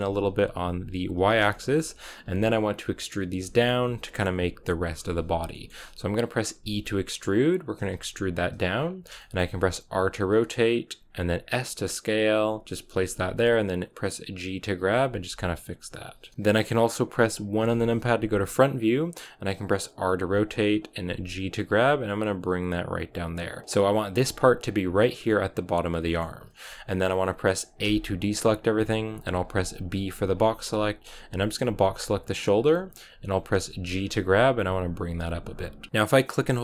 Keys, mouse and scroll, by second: 1.4-6.5 shift+middle drag, 6.5 e, 8.9 scroll down 1, 9.1 shift+middle click, 9.8 r, 11.3 s, 13.1 g, 14.7 s, 15.2 g, 16.3 KP_3, 17.5 KP_1, 19.9 r, 20.9 g, 24.2 scroll up 2, 26.0-27.7 shift+middle drag, 27.7 a, 31.8 b, 33.9 g, 35.9 scroll up 1, 36.1-36.6 middle drag.